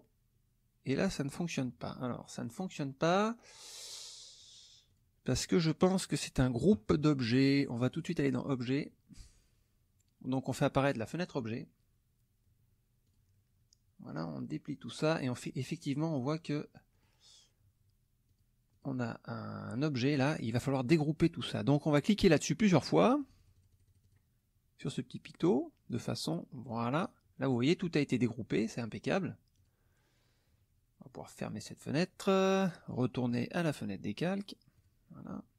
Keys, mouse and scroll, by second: 4.4 click, 4.9 click, 5.4 click, 7.9 click, 8.4 click, 13.0 click, 14.0-15.1 drag, 15.9 click, 16.9 click, 18.3 click, 18.7 click, 23.0-24.3 drag, 26.6 click, 29.5 click, 31.4 click, 32.9 click, 33.3 click, 34.7 click.